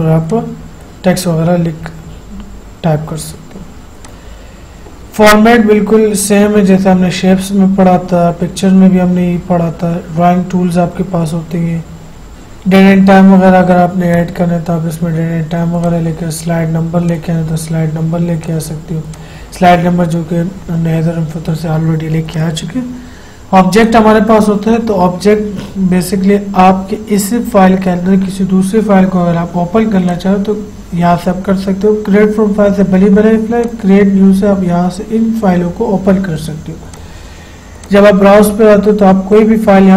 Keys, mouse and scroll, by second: 12.3 click, 14.3 click, 22.5 click, 30.3 click, 33.8 click, 35.0-35.7 scroll down 1, 37.1 click, 39.5-39.9 scroll down 1.